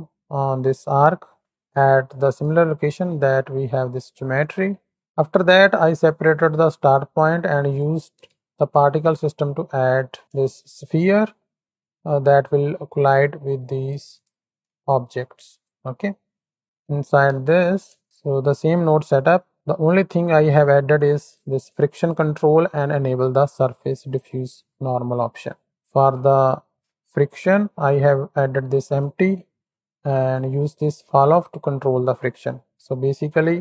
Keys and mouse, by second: 2.2 ctrl+shift+click, 4.8 x, 7.2 click, 8.7-9.0 ctrl+shift+drag, 9.6 click, 10.2 shift+Right, 10.2 shift+Left, 10.4 shift+click, 11.2-11.7 drag, 13.1 click, 14.1 ctrl+shift+click, 14.8 middle click, 14.9-15.7 drag, 17.2 Tab, 17.2 x, 18.9 click, 20.1 click, 21.1 click, 21.7 click, 25.7 shift+click, 26.5 middle click, 30.4 click.